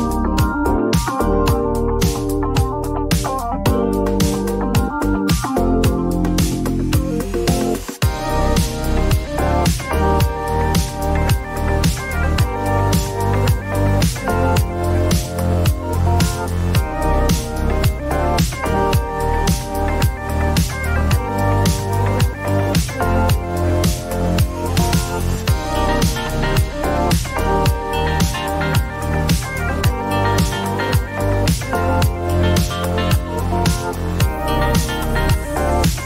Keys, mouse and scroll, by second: 0.0-0.4 typing, 0.5 Return, 1.5 click, 2.0 click, 2.4-3.8 typing, 4.2 click, 4.3 click, 6.5 click, 7.3 click, 8.5 click, 11.5 click, 13.0 click, 13.2-14.2 typing, 15.8 click, 17.1 click, 18.3 click, 19.9 click, 22.3 click, 24.9 click, 25.4 click, 33.3 click, 35.3 click.